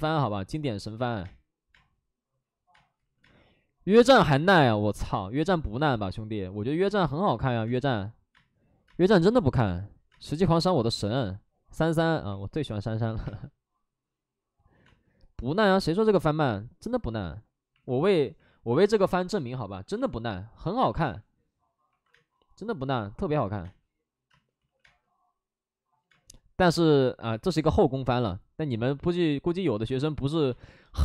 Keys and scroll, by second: 2.9 space, 2.9 ctrl+z, 7.6 space, 8.2 space, 8.9 space, 10.0 space, 11.1 space, 13.2 space, 14.8 space, 18.0 alt+s, 18.0 space, 20.8 alt+s, 21.0 space, 21.9 alt+s, 23.4 alt+s, 23.4 space, 23.6 space, 24.5 ctrl+z, 24.8 space, 30.0 space, 30.4 space.